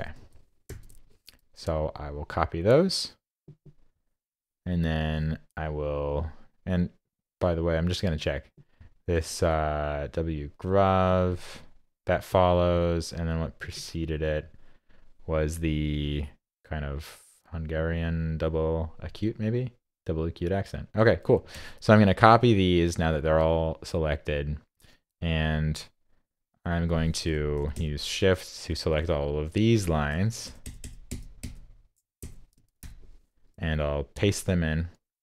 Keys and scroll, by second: 0.7 super+c, 21.5 super+c, 34.1 super+v.